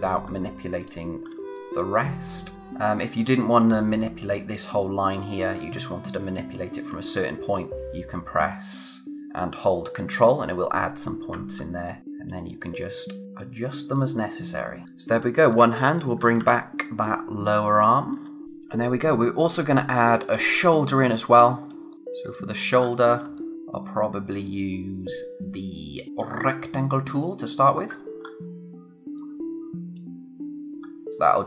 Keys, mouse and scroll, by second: 0.1 scroll down 1, 0.8 click, 1.1 scroll down 1, 1.3 space, 1.5 click, 1.7 scroll up 1, 1.7 click, 2.5 scroll down 1, 2.6 space, 2.8 click, 3.1 space, 4.8 click, 5.1 space, 6.2 ctrl+click, 11.5-12.0 scroll up 1, 12.0 click, 14.8 space, 15.9 click, 15.9-16.9 typing, 18.4 click, 19.1-19.6 scroll down 1, 19.6 space, 19.9 click, 20.1 space, 20.4 scroll up 1, 21.2 space, 21.4 click, 21.7 space, 21.9 click, 21.9 space, 22.2 click, 22.8-23.2 scroll up 1, 23.2 space, 23.3 click, 26.2-27.1 scroll down 1, 27.1 click, 28.2 scroll up 1, 28.4 click, 29.1 click, 30.8-31.1 scroll up 1, 31.1 click.